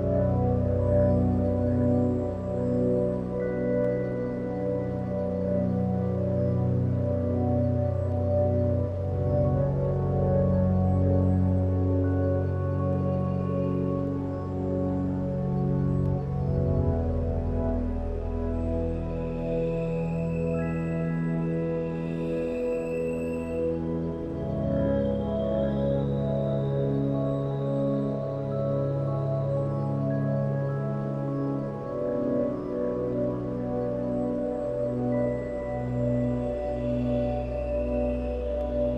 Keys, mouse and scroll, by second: 4.5 middle click, 4.6-5.0 middle drag, 6.1-6.6 middle drag, 23.2 g, 25.9 g.